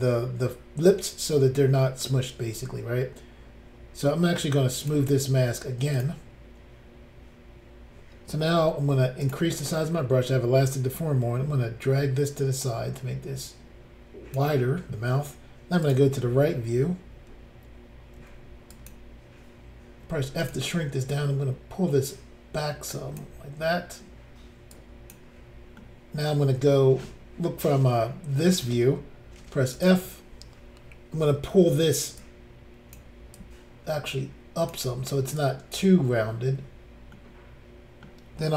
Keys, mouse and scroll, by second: 4.8 click, 4.9 click, 6.0 click, 8.6 f, 9.2 click, 9.3 click, 11.9 click, 15.9 click, 15.9 click, 18.2 f, 18.8 click, 18.9 click, 20.1 f, 20.5 click, 20.5 click, 21.1 click, 24.7 click, 25.8 middle click, 27.0 middle click, 29.4 f, 29.7 click, 29.8 click, 32.2 click, 33.4 click, 35.4 click, 37.1 middle click, 38.2-38.5 scroll up 1.